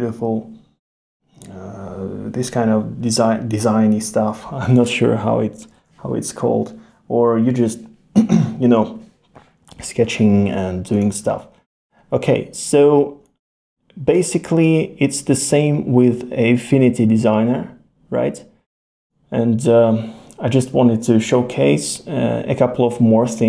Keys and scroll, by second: 5.8 super+z.